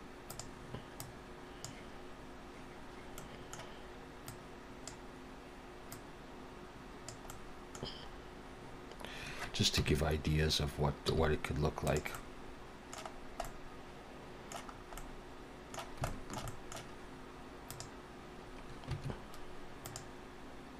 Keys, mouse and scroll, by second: 0.3 click, 3.2 middle click, 4.3 click, 5.9 click, 7.3 middle click, 8.1-8.9 scroll up 2, 9.8 KP_7, 11.1 g, 12.1 middle click, 13.2 scroll down 1, 13.4 middle click, 14.8 scroll up 1, 15.0 middle click, 16.1 shift+middle click, 16.5 middle click, 17.7 click, 19.8 click.